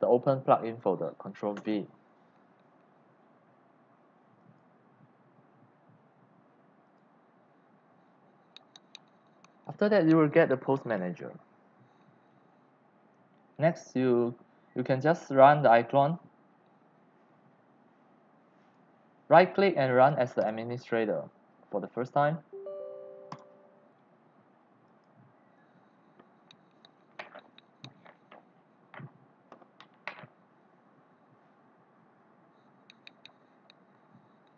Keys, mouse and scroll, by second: 0.1 click, 1.5 ctrl+v, 4.4 click, 5.9 click, 6.8 click, 8.5 scroll down 1, 13.6 click, 14.9-18.0 drag, 18.6 right click, 20.4 click, 24.9 click, 26.2-32.1 drag.